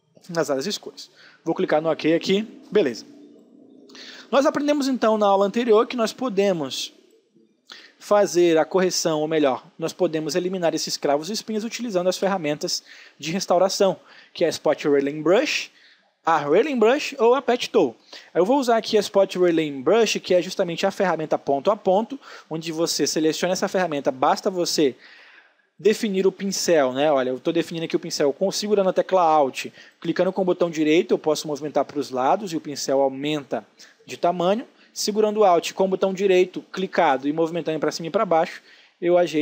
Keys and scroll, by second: 1.8 space, 7.7 space.